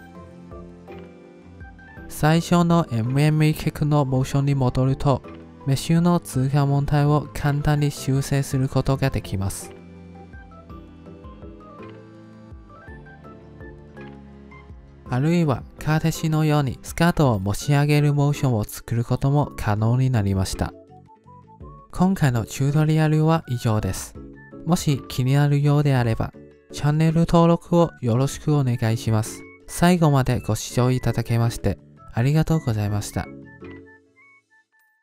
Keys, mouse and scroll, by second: 0.9 click, 1.2 g, 1.9 middle click, 2.8 click, 5.0-6.6 drag, 6.6 middle drag, 6.8-7.5 scroll up 4, 7.0 shift+middle click, 7.3 shift+middle click, 7.5 alt+shift+z, 8.0-9.5 middle drag, 9.5 alt+shift+z, 9.6 click, 9.7 ctrl+Tab, 10.1 shift+click, 10.4 click, 11.3 g, 14.0-15.0 middle drag, 15.0 click, 15.3 middle click, 15.6 g, 16.3 middle click, 16.8 click, 17.2 middle click, 17.4 g, 17.7-18.1 middle drag, 18.1 drag, 18.3 middle click, 18.4 g, 19.0-19.4 middle drag, 19.4 click, 19.9-20.3 shift+middle drag, 20.3-20.7 drag, 20.7-21.5 ctrl+middle drag, 21.5 alt+shift+z, 21.7-23.9 middle drag, 23.9-33.7 drag.